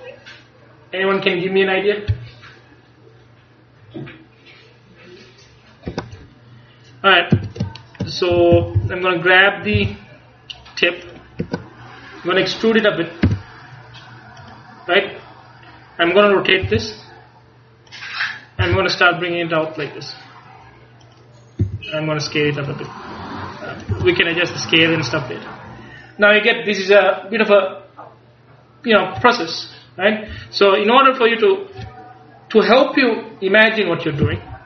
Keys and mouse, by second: 6.0 Escape, 7.4-9.9 typing, 13.4 e, 14.6-16.3 drag, 16.7 r, 18.0 click, 18.7 g, 21.2 click, 21.7 s, 24.0 s, 24.0 click, 24.8-26.7 drag, 34.3 a.